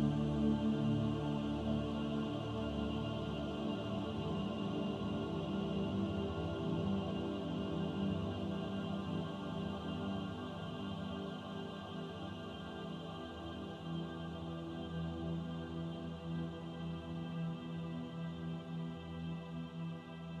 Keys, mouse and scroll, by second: 1.8 shift+click, 2.9-3.7 scroll up 2, 3.8 shift+middle click, 5.3 ctrl+b, 14.1 middle click, 14.5 Tab, 15.0 right click, 16.1 middle click, 18.8 shift+middle click, 19.4-20.4 scroll up 1.